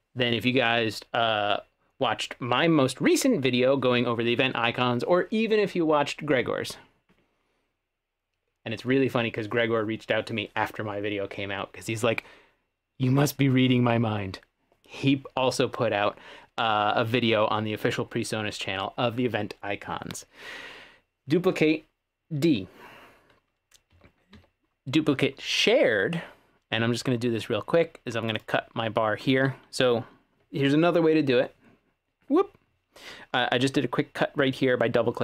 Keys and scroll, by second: 23.9 w, 24.7 w.